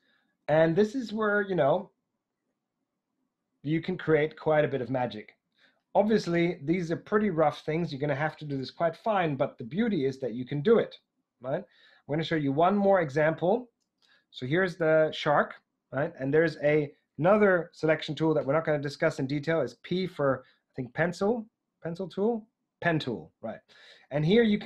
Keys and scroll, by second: 18.3 p.